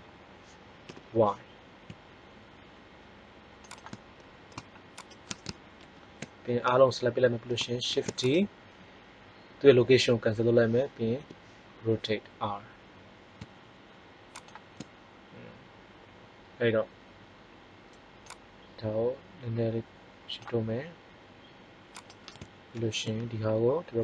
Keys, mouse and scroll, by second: 3.7-4.7 drag, 5.7 ctrl+l, 7.8 shift+d, 11.1 r, 18.1-20.0 drag, 21.9 right click, 22.7 ctrl+l, 23.9 click.